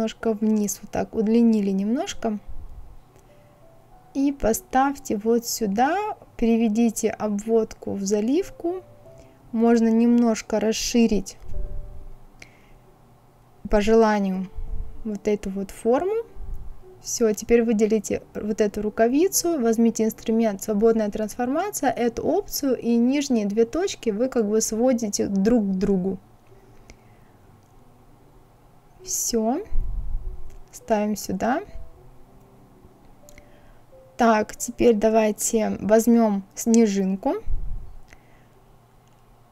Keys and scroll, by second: 38.9 ctrl+c, 39.3 ctrl+v.